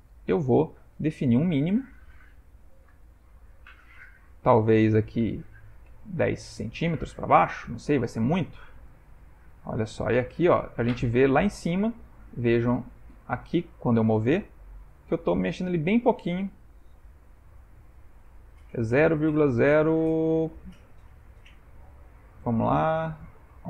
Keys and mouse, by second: 0.9 middle click, 3.0 click, 4.0 click, 6.2 ctrl+middle click, 6.4 ctrl+middle click, 7.0 middle click, 7.7 g, 14.5 g.